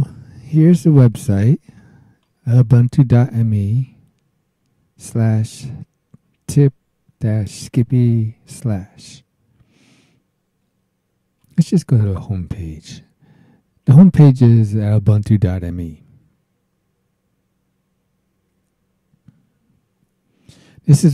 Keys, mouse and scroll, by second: 1.3 click, 11.4 click.